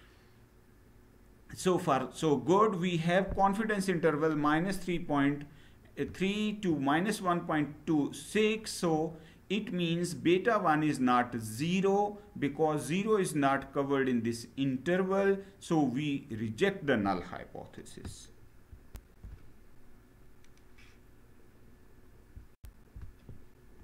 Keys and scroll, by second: 18.6 shift+F9.